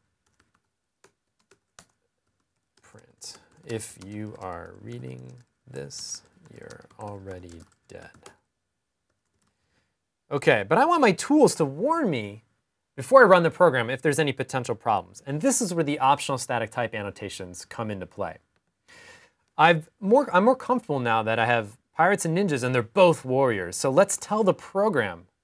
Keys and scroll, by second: 0.3-6.8 typing, 7.8-8.6 typing, 23.4 Up, 23.4 Up, 24.0 typing.